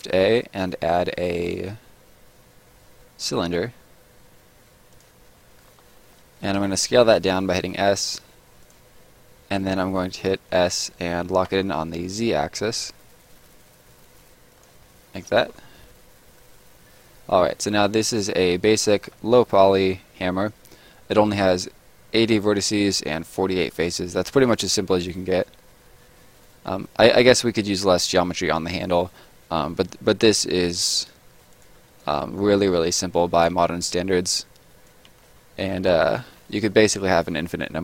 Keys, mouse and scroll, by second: 4.9 click, 5.4 middle click, 5.4 scroll down 1, 5.9 middle click, 6.6 s, 8.6 click, 10.5 s, 11.4 z, 14.5 click, 14.8 middle click, 15.6 middle click, 18.6 middle click, 24.0 middle click, 26.6 middle click, 30.9-31.6 scroll down 1, 31.6 click, 31.8 right click, 32.9 right click, 34.1 Return, 34.7 right click, 35.1 right click, 35.2 Return, 35.5-35.9 scroll up 1, 35.9 middle click.